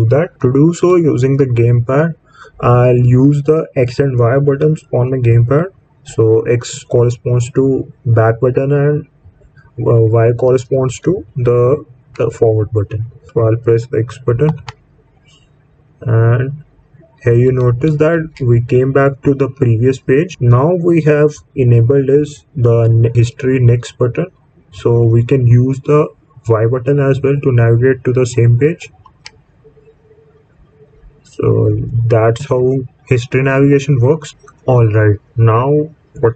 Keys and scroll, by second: 14.4 x, 28.9 y.